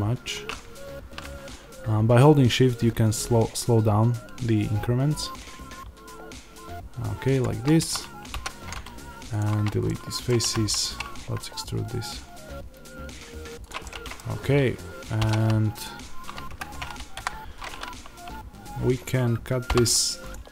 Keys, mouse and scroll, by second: 9.2 x, 9.8 middle click, 10.3 a, 10.7 e, 13.6 click, 13.7 middle click, 14.3-20.5 middle drag, 14.3-15.1 scroll, 17.0-20.5 drag, 19.6 k.